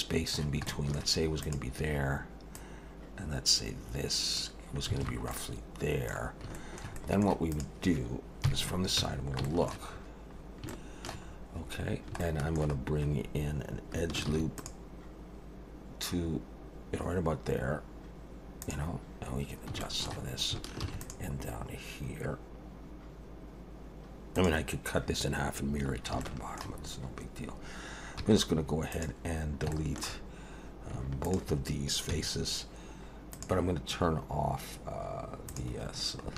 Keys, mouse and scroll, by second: 0.7 shift+middle click, 1.4 click, 2.5 click, 5.0 alt+a, 5.3 middle click, 6.2 scroll down 2, 6.5 shift+middle click, 7.0 middle click, 7.5 click, 8.4 KP_3, 9.0 Tab, 9.4 shift+middle click, 10.0-10.4 scroll up 4, 10.7 shift+middle click, 11.3 scroll up 3, 11.9 scroll down 1, 12.2 shift+middle click, 12.8 scroll down 1, 14.3 ctrl+r, 19.4 scroll down 2, 19.8 shift+middle click, 20.8 ctrl+r, 25.9 scroll up 2, 26.2 shift+middle click, 26.8 scroll up 2, 28.2 3, 28.9 click, 29.4 scroll down 2, 29.7 shift+middle click, 31.2 shift+click, 32.1 x, 35.5 click, 36.2 scroll up 2.